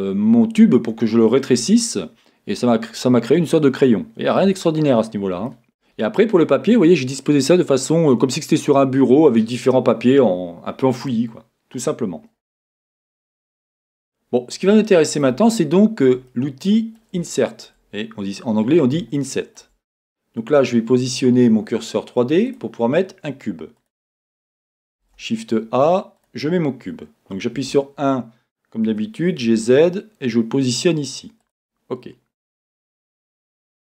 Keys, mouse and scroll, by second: 3.4-4.4 scroll down 2, 4.4 Tab, 5.5-20.5 shift+middle drag, 5.6-6.4 scroll up 1, 12.3-13.4 scroll down 2, 18.5-19.2 scroll down 2, 20.5-25.0 drag, 25.0 shift+a.